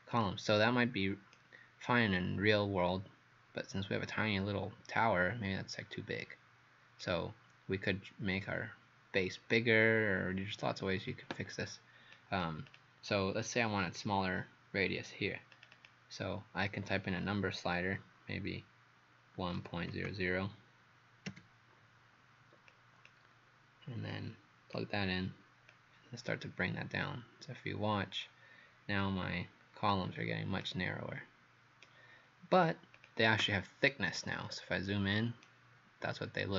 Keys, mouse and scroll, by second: 1.4 right click, 12.2 click, 12.7 click, 15.6 click, 15.7 click, 19.4 KP_1, 19.6 KP_Decimal, 19.9 KP_0, 20.1 KP_0, 21.3 KP_Enter, 22.7 click, 30.6 right click, 32.6 click, 33.0 click, 33.9 right click, 34.5-35.5 scroll up 7, 35.5 right click.